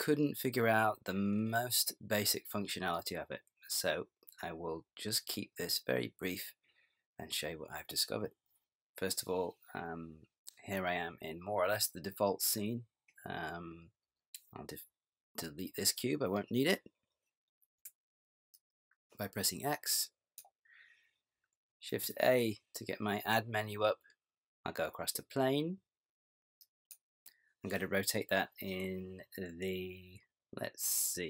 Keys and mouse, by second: 17.8 x, 22.0 shift+a.